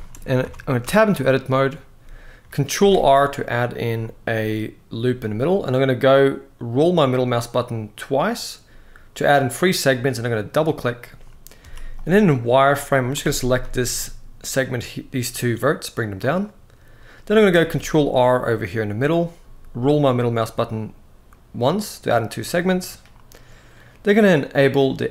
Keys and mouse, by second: 0.1 Tab, 0.6 shift+middle click, 2.5 ctrl+r, 10.2 click, 11.3 z, 12.2-12.8 drag, 13.0 g, 13.4 z, 15.7 click, 17.3 ctrl+r, 22.1 click.